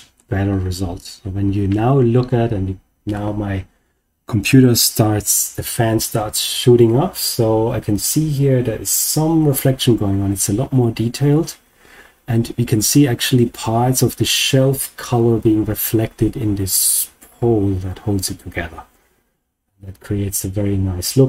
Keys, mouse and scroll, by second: 0.5 scroll up 2, 19.7-21.2 scroll down 1.